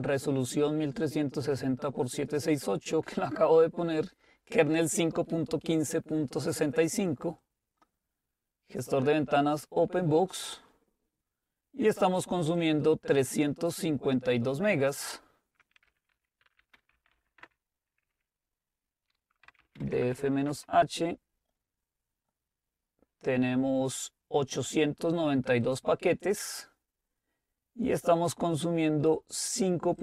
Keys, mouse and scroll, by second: 1.0-4.1 drag, 7.4-10.4 drag, 12.6 click, 14.9 click, 15.9-17.7 typing, 19.5-20.6 typing, 21.9-23.7 scroll up 1, 25.7-27.6 drag, 26.9-27.5 scroll down 1, 27.5-28.2 scroll down 1, 28.2-28.7 scroll down 1.